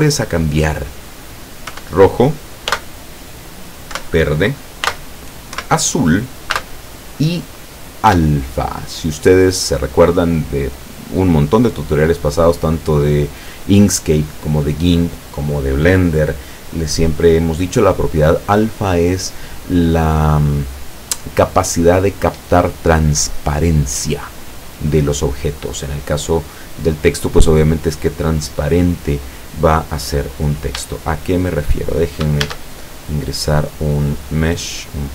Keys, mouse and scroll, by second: 1.7 KP_1, 2.7 ,, 3.9 KP_1, 4.9 ,, 5.6 KP_1, 6.6 ,, 8.1 KP_1, 31.1 shift+middle click, 32.5 shift+a, 34.2 click, 35.0 middle click.